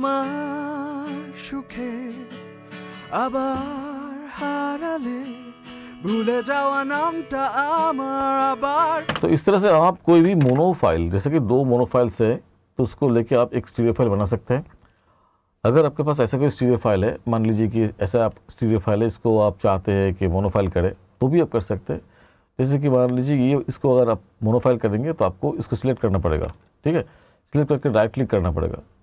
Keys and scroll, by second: 9.1 space, 10.4 ctrl+=.